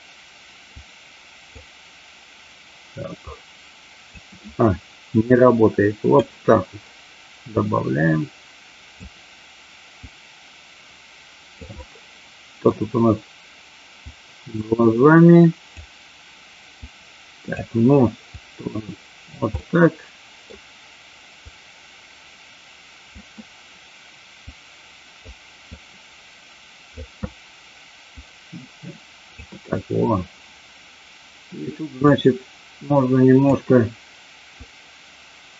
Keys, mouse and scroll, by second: 0.8 click, 3.2-4.2 drag, 5.4 click, 7.5-9.0 drag, 10.0-11.5 drag, 11.6-12.6 middle drag, 14.1-15.6 drag, 16.8 click, 18.4 click, 19.6 middle click, 21.4-23.1 drag, 24.4 click, 25.6-27.0 drag, 28.1-29.4 drag, 32.0-33.5 drag, 34.6-35.5 drag.